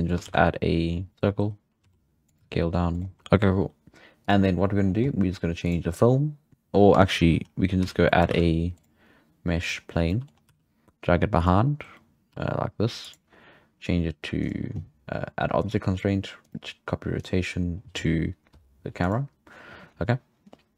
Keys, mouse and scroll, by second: 0.2 shift+a, 1.8 s, 2.4 g, 3.1 scroll up 1, 3.2-7.3 shift+middle drag, 3.2-4.2 scroll down 3, 4.2 click, 4.8-5.6 scroll down 7, 5.6-6.0 drag, 6.0-7.3 scroll down 1, 7.3-8.0 scroll down 17, 7.8 z, 7.9 z, 8.0 middle click, 8.2 shift+a, 9.7 shift+a, 10.0 scroll down 1, 10.0 middle drag, 10.3 scroll up 2, 10.5 g, 12.3 g, 14.4 click, 15.6-20.7 drag.